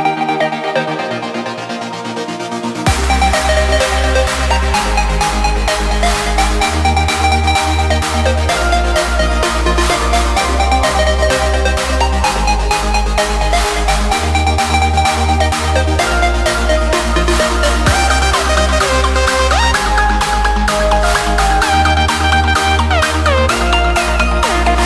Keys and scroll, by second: 5.4 ctrl+space, 5.8 ctrl+v, 7.3 ctrl+space, 9.1 ctrl+shift+[, 9.9 ctrl+space, 15.2 ctrl+space, 15.7 ctrl+space, 20.4 ctrl+space, 21.2 ctrl+space, 22.6 ctrl+shift+[, 22.8 ctrl+space.